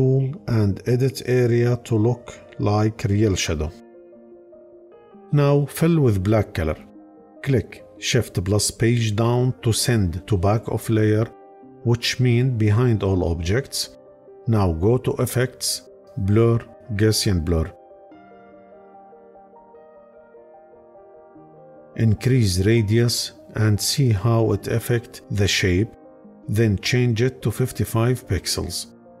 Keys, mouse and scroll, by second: 6.2-7.0 drag, 7.8 shift+Page_Down.